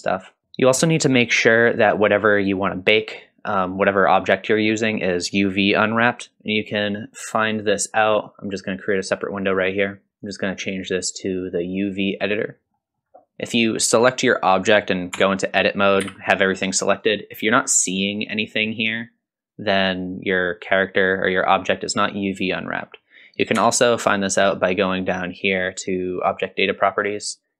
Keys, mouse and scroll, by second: 7.5-9.2 drag, 10.2-11.9 drag, 12.6-13.4 scroll down 1, 13.4 click, 15.2 Tab, 16.0 a, 23.6 Tab, 26.6 click.